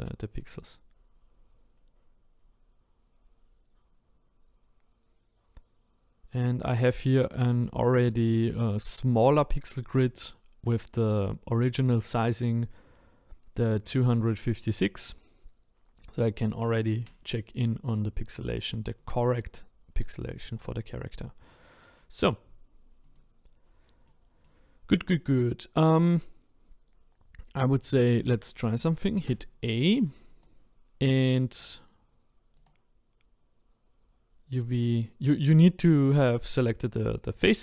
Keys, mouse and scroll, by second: 18.5-19.1 scroll down 1, 19.1 click, 19.9-20.2 scroll up 1, 20.2-21.4 scroll down 2, 21.4-23.1 middle drag, 23.1 click, 24.0-25.1 middle drag, 25.1 click, 25.9 click, 29.2 a, 31.9-37.6 right drag.